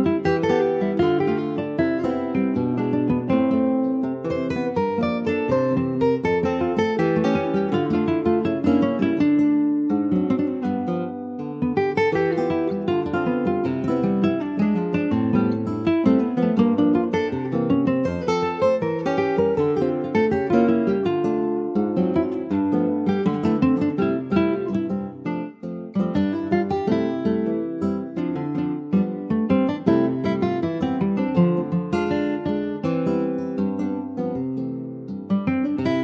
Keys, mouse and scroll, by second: 1.1 s, 6.5 alt+middle click, 6.9 alt+middle click, 8.3 s, 16.5 scroll down 4, 16.7 middle click, 17.3 ctrl+s, 17.6 middle click, 17.9 scroll up 4, 18.2-19.6 middle drag, 19.6-20.2 scroll up 1, 20.3 click, 20.9 shift+click, 21.6 shift+click, 22.0 alt+middle click, 22.3 alt+z, 23.0 shift+middle click, 23.6 click, 27.4 Tab, 27.7 middle click, 28.1 scroll down 4, 28.3 Tab, 28.7 click, 29.0 scroll down 1, 29.2 alt+z, 29.3 click, 29.6 scroll down 3, 29.8 shift+middle click, 30.2 ctrl+scroll up 1, 30.5 ctrl+s, 30.8 middle click, 31.1 scroll up 1, 31.3 ctrl+s, 31.4 middle click, 32.3-32.6 scroll up 2, 32.6 middle click, 33.0 scroll up 1, 33.3 ctrl+s, 33.5 shift+middle click, 34.2 click, 34.6 shift+middle click, 34.9 shift+scroll up 2, 35.1 click, 35.4 Tab, 35.8-36.0 scroll up 4.